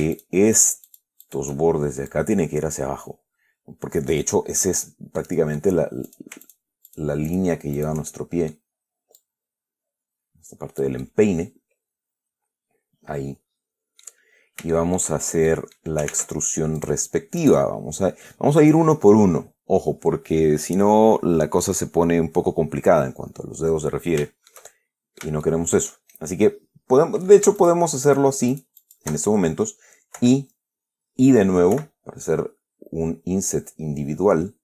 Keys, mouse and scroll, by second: 0.1 shift+right click, 0.4 shift+right click, 0.8 shift+right click, 1.5 shift+right click, 2.4-5.3 drag, 5.5 middle click, 6.4 shift+right click, 6.7 shift+right click, 7.2 shift+right click, 7.6 shift+right click, 8.1 shift+right click, 8.4 shift+middle click, 9.5-11.3 drag, 11.3-14.5 middle drag, 14.6 scroll up 1, 15.0 shift+click, 15.5 shift+scroll down 2, 15.8 shift+middle click, 16.4 ctrl+Tab, 17.1 click, 17.7 right click, 24.5-25.7 shift+middle drag, 26.0 shift+middle click, 27.9 shift+right click, 28.4 shift+right click, 28.8 shift+right click, 30.5 i, 32.0 i.